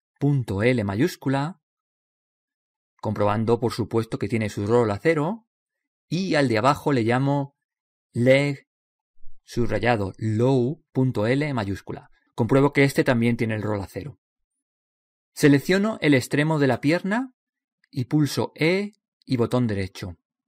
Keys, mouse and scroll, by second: 3.4 right click, 4.2 middle click, 5.1 click, 13.3-16.6 right drag, 17.0 right click, 19.2 e.